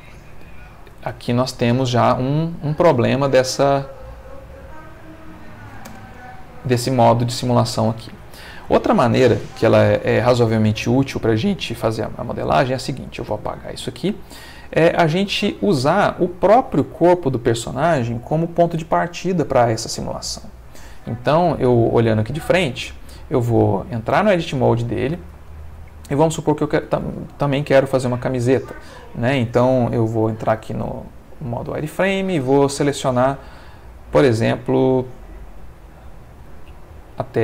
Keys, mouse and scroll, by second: 0.1 middle click, 1.1 ctrl+middle click, 4.4 click, 5.2 click, 5.8 space, 7.4 middle click, 8.7 Escape, 9.2-10.5 middle drag, 10.6-12.5 ctrl+middle drag, 12.6 x, 12.9 click, 13.7 middle click, 14.7 click, 21.9 click, 23.6 ctrl+middle click, 24.1 ctrl+Tab, 25.5 ctrl+middle click, 27.1-31.0 ctrl+middle drag, 30.1 z, 31.0 click, 32.6-37.4 drag.